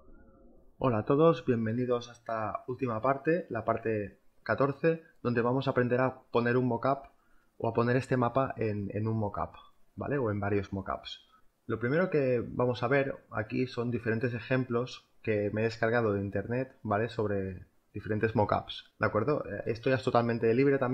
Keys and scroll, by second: 1.5 space, 2.8 v.